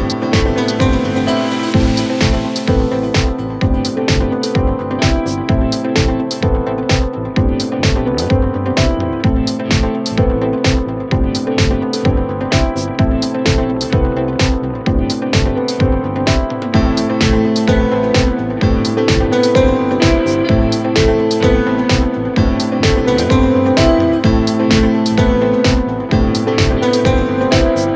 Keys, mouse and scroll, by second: 24.5-27.9 middle drag.